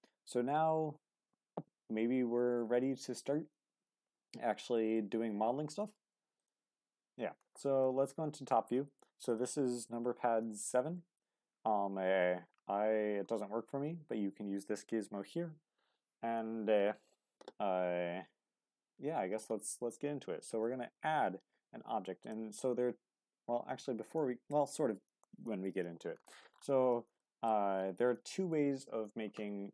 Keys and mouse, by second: 7.8 click, 19.4 shift+a, 27.2 shift+middle drag.